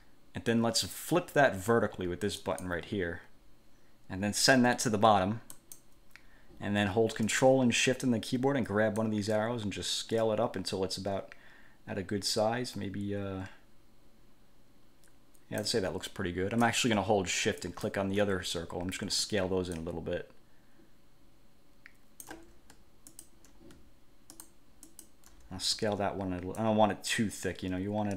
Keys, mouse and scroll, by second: 2.6 click, 5.7 click, 9.2-16.0 ctrl+shift+drag, 17.8 shift+click, 19.9-22.6 ctrl+shift+drag, 23.3 shift+click, 24.6 shift+click, 25.0 shift+click, 26.8-28.1 ctrl+shift+drag.